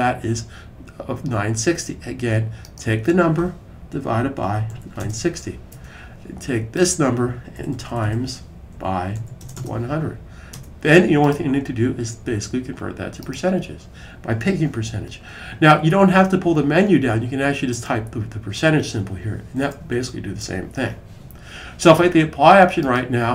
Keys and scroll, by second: 3.6-5.3 typing, 7.4 Right, 7.6 Right, 7.7 Right, 7.8 Right, 8.3-9.9 typing, 12.7-13.4 typing, 19.3 typing.